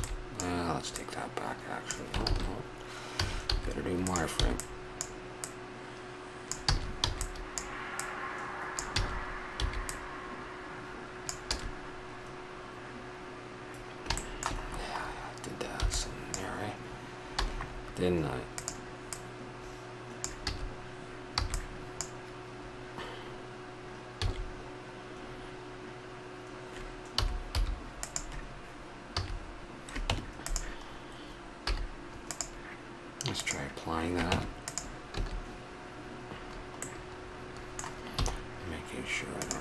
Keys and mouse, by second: 0.3 click, 2.2 ctrl+z, 3.1 a, 3.5 z, 4.4 b, 5.4-6.5 drag, 6.7 a, 7.0 b, 7.2 click, 8.0 click, 9.0 a, 9.6 b, 11.4 a, 14.2 middle click, 15.8 b, 17.4 a, 18.5-20.5 drag, 20.5 a, 21.4 b, 24.1 s, 29.1 a, 30.1 Tab, 31.6 z, 34.3 Tab, 35.1 a, 36.8 middle click, 38.2 w.